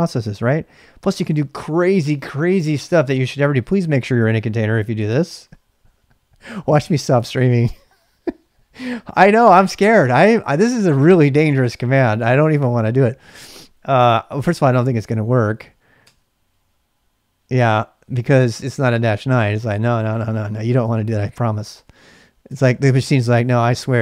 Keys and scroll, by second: 2.1-3.4 typing, 5.2 typing, 15.4 1, 16.0 Return, 17.8-19.3 typing, 20.8 Return, 22.5 ctrl+[, 22.7-24.0 typing.